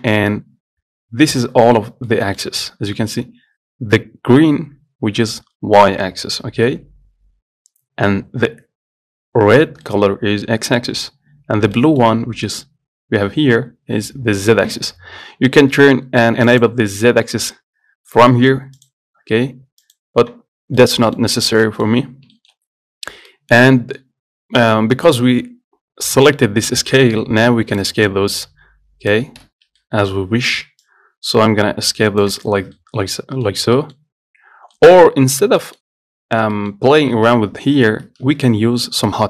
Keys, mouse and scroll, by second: 0.4-1.6 scroll up 1, 1.6-2.9 middle drag, 2.9-4.6 scroll down 1, 4.6-5.7 scroll down 3, 10.1-11.4 middle drag, 11.4-12.0 scroll up 1, 12.0-14.7 middle drag, 15.3-15.7 scroll down 1, 15.7-16.7 scroll up 1, 16.7-19.6 drag, 20.8 scroll down 2, 21.0 middle click, 21.5-21.9 scroll up 2, 21.9 middle click, 22.3-22.6 scroll down 4, 22.6 shift+middle click, 22.8-23.6 scroll up 2, 23.6-26.3 middle drag, 28.1 click, 29.7 ctrl+z, 30.0-31.1 middle drag, 31.1 click, 32.7 scroll down 4, 33.0 middle click, 33.7-34.0 scroll up 1, 34.0 middle click, 34.3-35.0 scroll down 2, 35.0-36.4 middle drag, 36.4 scroll up 2, 36.8-38.0 middle drag, 38.0 scroll down 1, 38.5 ctrl+z, 39.0 scroll up 2.